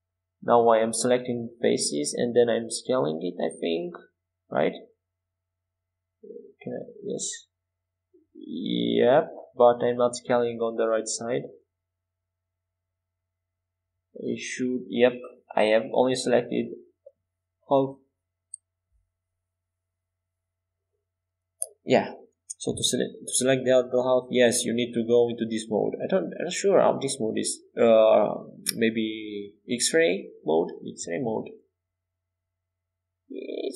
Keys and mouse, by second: 7.0 s, 17.5 ctrl+z, 19.5 KP_5, 19.8 KP_1, 20.3 KP_3, 22.6 click, 24.1 z, 25.6 c.